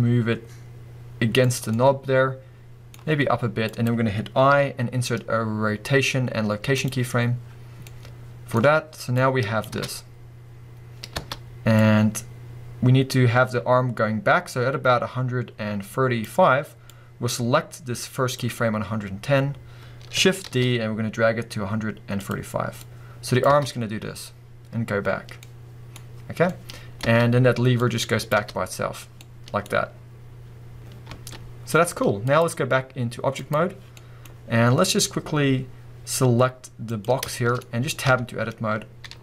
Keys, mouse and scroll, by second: 1.7-3.8 middle drag, 3.1 g, 3.8 click, 7.8-9.2 middle drag, 9.2-22.3 drag, 9.7 space, 11.2 space, 20.4 shift+d, 22.8-25.4 drag, 23.5 space, 25.4-27.8 middle drag, 27.1 space, 27.8-29.3 drag, 28.3 space, 29.3-31.1 middle drag, 31.1 space, 32.2-33.9 drag, 33.9 middle click, 34.3-35.0 scroll up 1, 36.9 click, 37.3 shift+middle click, 37.6-38.1 scroll up 1, 38.1 b.